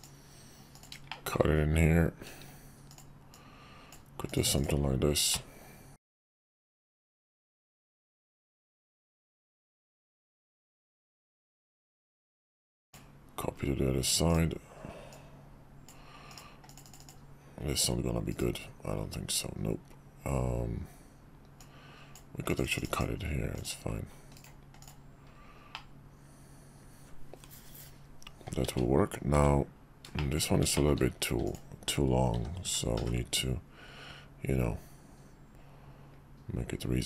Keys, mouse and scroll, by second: 0.7 click, 1.1 shift+middle drag, 2.9 click, 3.3-4.0 drag, 5.3 middle click, 6.4 middle click, 8.2-10.2 drag, 11.6 click, 12.2 alt+x, 12.8 drag, 14.3 click, 15.1-15.9 drag, 21.6-22.1 drag, 23.5 click, 24.8 click, 25.7-28.4 middle drag, 29.3 `, 30.1 shift+middle click, 30.7 shift+middle click, 31.4 click, 32.3 s.